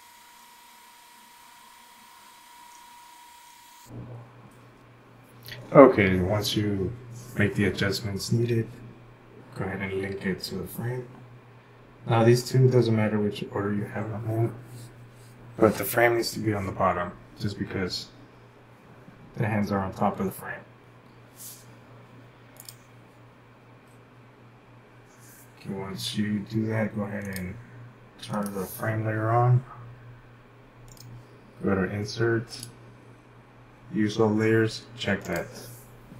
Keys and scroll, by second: 2.7 typing.